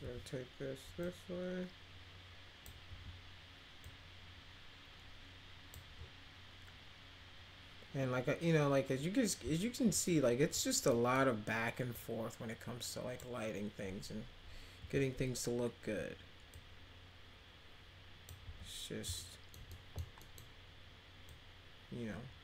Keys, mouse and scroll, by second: 0.0 e, 1.0-2.6 drag, 3.8-5.7 drag, 9.3-9.9 middle drag, 10.0 middle click, 10.9 middle click, 11.9-13.1 drag, 16.5-18.2 drag, 18.4 w, 19.1 alt+middle click, 19.7 middle click, 20.2 middle click, 21.2-22.4 drag.